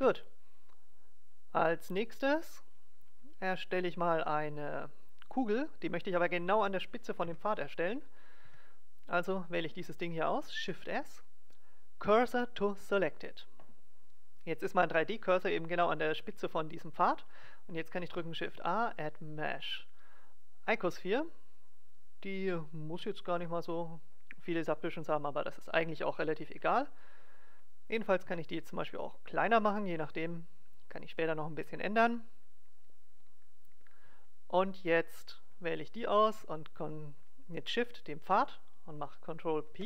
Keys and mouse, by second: 0.0 Tab, 7.2 KP_7, 8.4 Tab, 9.2-10.9 drag, 10.6 shift+s, 15.7 Tab, 18.0 shift+a, 28.3 s, 31.8-33.8 drag, 37.7-39.6 right drag, 39.6 ctrl+p.